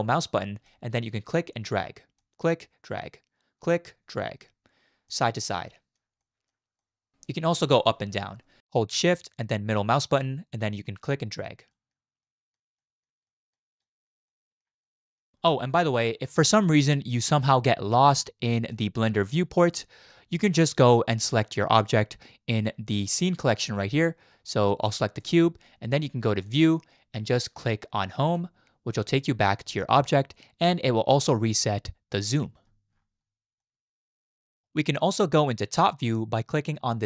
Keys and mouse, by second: 0.6-1.0 shift+drag, 1.0-1.3 shift+middle drag, 2.2 shift+middle click, 3.6 shift+middle click, 5.1 shift+middle click, 5.7 shift+click, 6.2 shift+click, 6.8 shift+click, 10.2 shift+drag, 10.4-10.8 shift+middle drag, 11.1-11.5 shift+middle drag, 11.7 shift+middle drag, 12.2-12.5 shift+middle drag, 12.8 shift+middle drag, 13.3 shift+middle drag, 13.8 shift+middle drag, 14.3-14.6 shift+drag, 14.8-15.2 shift+drag, 15.7-16.3 shift+middle drag, 16.6-17.9 middle drag, 18.8-19.3 shift+drag, 19.5-20.0 drag, 19.5-20.1 middle drag, 19.5-20.0 right drag, 26.6-28.4 drag, 33.6-33.9 middle drag, 34.2 middle click, 34.3 drag, 34.5 middle click.